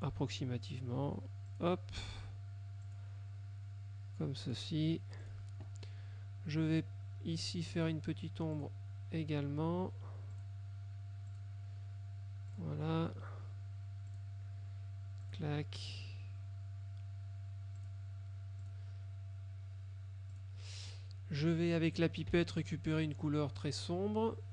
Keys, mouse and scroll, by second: 0.1 click, 1.6 click, 2.9 click, 4.5 click, 5.3 click, 7.9 click, 8.7 click, 10.5 click, 11.4 click, 12.6 click, 14.2 click, 15.3 click, 17.9 click, 18.7 click, 20.4 click, 22.4 F7, 23.7 click.